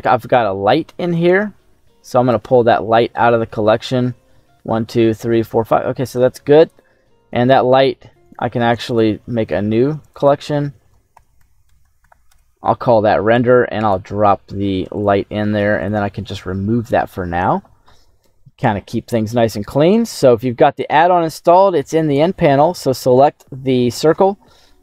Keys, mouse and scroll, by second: 1.1 click, 6.5 click, 8.2 right click, 9.9 click, 10.1-12.2 drag, 13.3 click, 14.9 click, 15.7 click, 18.3 middle click, 19.5 right click, 21.6 click.